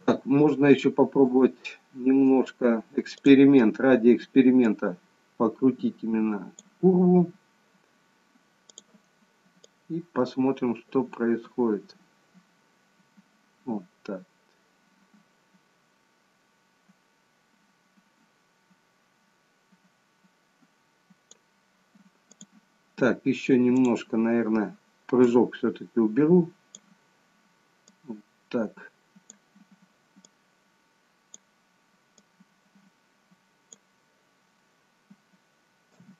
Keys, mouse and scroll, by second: 1.2 click, 4.6 click, 8.6 click, 9.6 click, 22.9 click, 24.1 click, 25.2 click, 27.8 click, 30.2 click, 32.1 click, 35.1-35.8 a, 35.8 i.